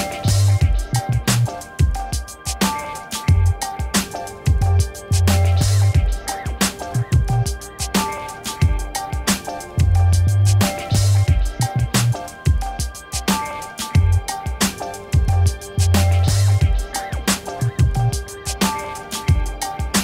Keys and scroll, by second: 3.5 n, 3.8 e, 4.4 o, 5.4 t, 10.6 5, 11.1 Return, 14.7 shift+c, 15.3 r, 18.2 e, 18.6 BackSpace, 19.5 r.